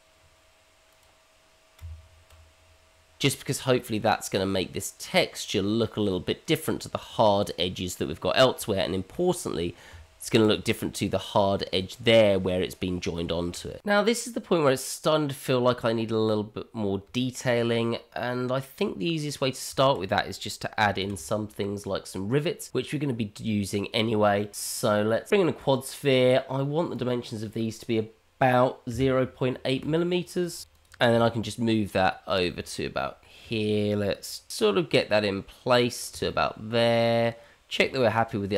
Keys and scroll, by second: 1.8 Tab, 9.9 Tab, 13.0 Tab, 21.0 shift+a, 30.2 BackSpace, 31.1 g, 35.0 g.